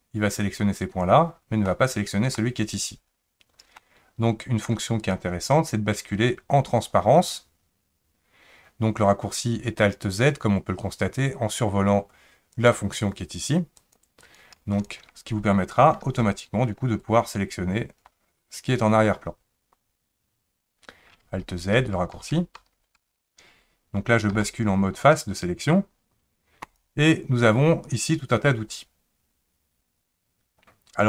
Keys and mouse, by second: 1.7 middle click, 3.8 middle click, 5.1-12.7 drag, 13.8 click, 14.3 click, 16.1 alt+z, 17.0-18.0 drag, 21.3 alt+z, 21.8 alt+z, 22.1 alt+z, 22.6 alt+z, 23.0 alt+z, 24.3 3, 26.6 click.